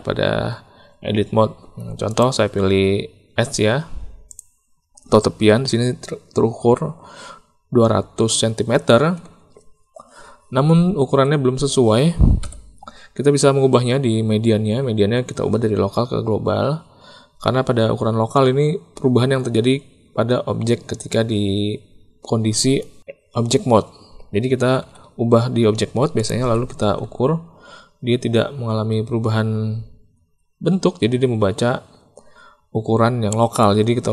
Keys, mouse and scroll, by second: 2.0 click, 11.0 a, 12.3 n, 22.6 Tab, 24.8 s, 26.3 ctrl+z, 27.0 Tab.